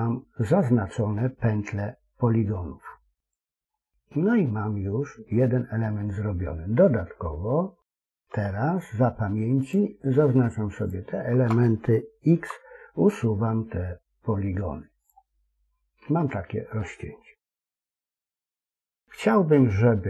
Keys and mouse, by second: 3.7-5.9 middle drag, 9.5 alt+shift+click, 10.7 alt+shift+click, 12.2 x, 15.4-16.7 middle drag, 17.3 KP_1.